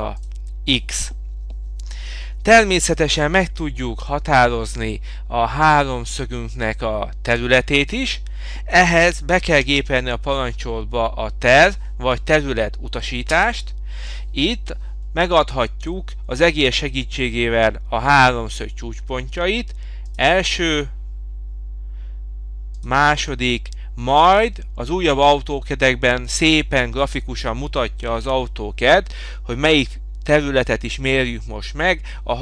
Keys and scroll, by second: 3.9 Delete, 13.4 Return.